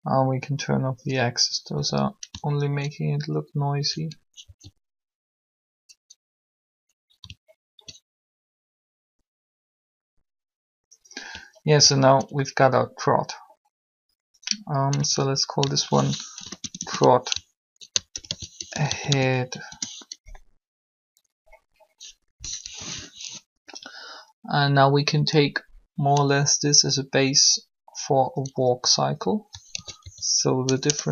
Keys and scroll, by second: 1.7 a, 4.4 alt+a, 16.3-16.9 typing, 18.1-19.6 typing, 19.6 Return, 22.3-22.6 typing, 29.5-30.9 typing.